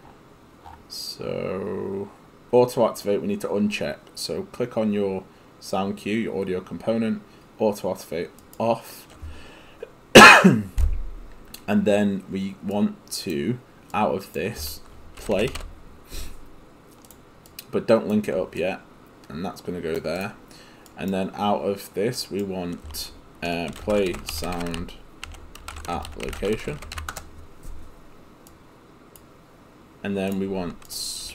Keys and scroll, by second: 15.1-16.1 typing, 23.6-27.5 typing, 31.1-31.3 typing.